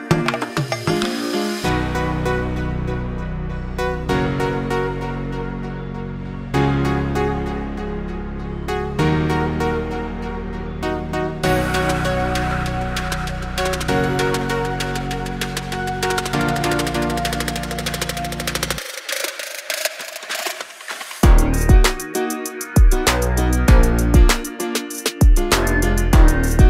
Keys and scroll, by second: 0.6 m, 1.4 Right, 2.3 space, 2.6 p, 3.7 5, 4.0 Return, 4.2 space, 10.4-15.8 typing, 19.2 m, 22.8 q, 23.4 Left.